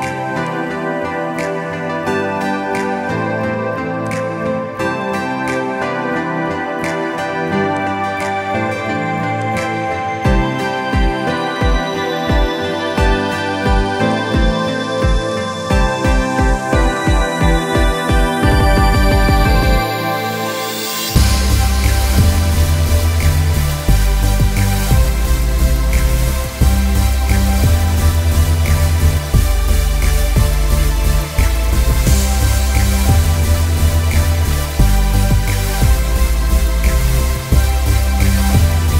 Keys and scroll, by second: 3.0 o.